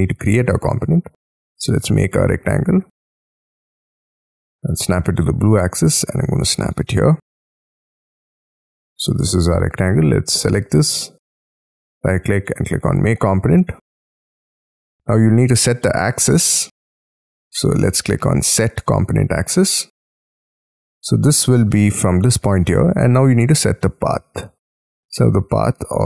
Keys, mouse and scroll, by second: 0.9 r, 4.6 Up, 7.2 middle click, 7.9 middle click, 9.4 space, 9.9 double click, 11.5 right click, 13.8 shift+middle click, 15.7 middle click, 19.5 shift+middle click, 20.1 scroll up 5, 23.0-25.2 scroll down 4, 25.2-26.0 scroll down 5.